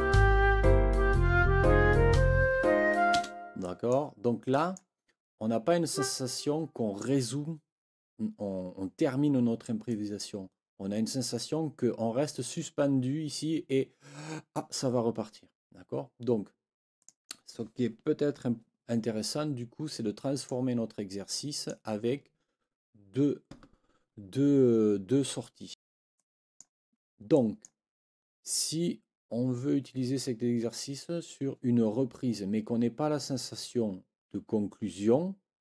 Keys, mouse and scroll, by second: 3.1 space, 3.6 click, 4.5 click, 5.9 click, 9.9 click, 17.0 click, 19.9 click, 21.3 click, 25.7 click, 26.1 click, 27.3 click.